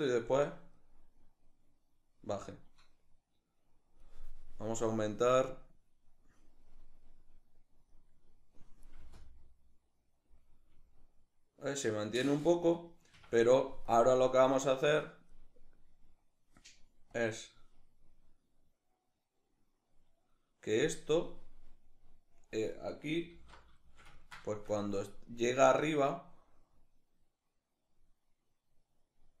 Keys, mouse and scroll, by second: 0.4-10.9 drag, 8.6 space, 10.9-13.5 middle drag, 12.8 Escape, 13.5-23.5 drag, 23.5-24.6 ctrl+shift+middle drag, 24.6-29.4 drag.